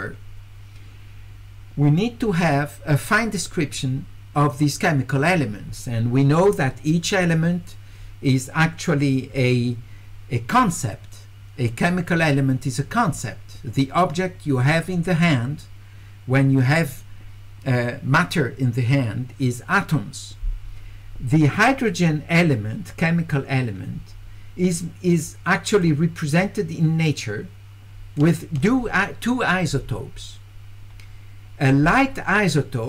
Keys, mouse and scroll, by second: 25.7 click, 28.2 ctrl+click.